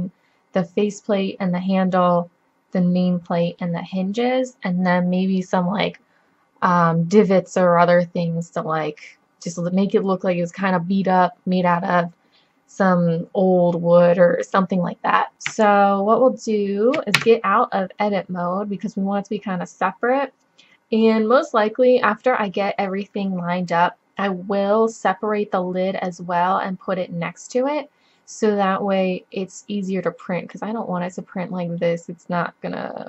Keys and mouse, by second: 3.3-4.8 middle drag, 17.2 Tab.